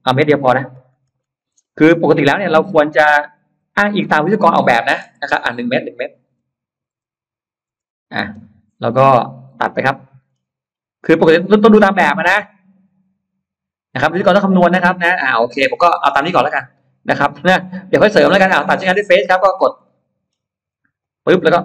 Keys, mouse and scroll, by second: 0.1 ctrl+z, 0.6 ctrl+z, 1.4-2.1 scroll down 2, 1.8 middle click, 2.1 middle click, 2.1 space, 3.0 ctrl+z, 3.7 click, 3.9 click, 4.7 middle click, 4.9 m, 5.2 click, 6.8 typing, 7.7 Return, 8.6 space, 8.7 click, 9.4 middle click, 10.3 scroll down 1, 19.1 click, 19.7 middle click, 20.1-20.5 scroll up 1, 20.9 click.